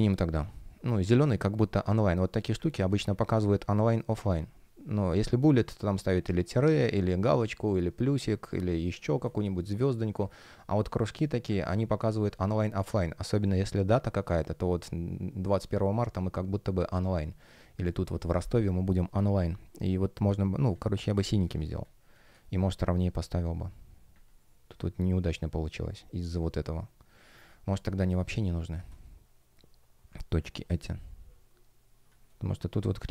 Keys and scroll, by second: 9.1 space, 21.5 space, 22.3 shift+p, 27.9 space, 30.3 space.